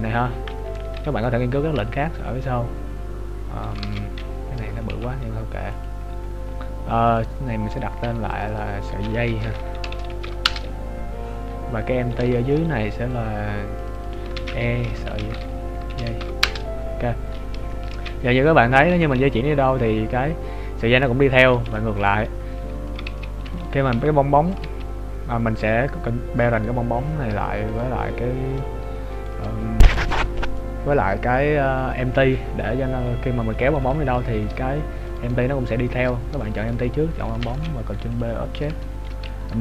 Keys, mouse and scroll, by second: 1.0-1.6 scroll down 4, 1.7 s, 4.3-4.9 scroll down 12, 4.9 g, 6.0 scroll up 2, 7.1 right click, 7.1-8.0 scroll up 7, 8.3 click, 12.0-12.4 scroll down 3, 12.4 shift+middle click, 13.1 right click, 13.8 click, 17.3-17.8 scroll down 5, 17.8 shift+middle click, 19.1 g, 22.1 right click, 23.2 ctrl+z, 23.6 right click, 23.9 g, 24.8 ctrl+z, 25.1-26.3 scroll up 6, 26.8 right click, 29.3 shift+right click, 30.2 shift+right click, 35.2 right click, 36.7 shift+right click, 37.5 ctrl+p, 38.5 scroll down 2, 38.8 shift+middle click.